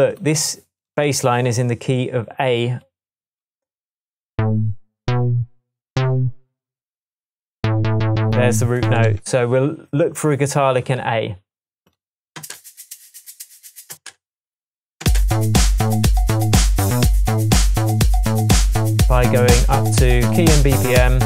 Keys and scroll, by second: 9.1 Tab, 12.4 space, 14.0 space.